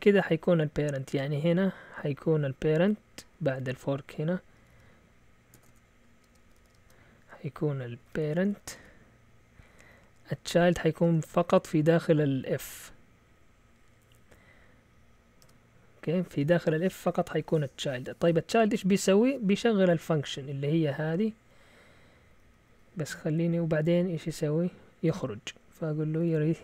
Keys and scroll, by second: 1.5 typing, 3.3 typing, 4.6-12.3 typing, 15.4 Tab, 21.0-22.7 typing, 26.0-26.6 typing.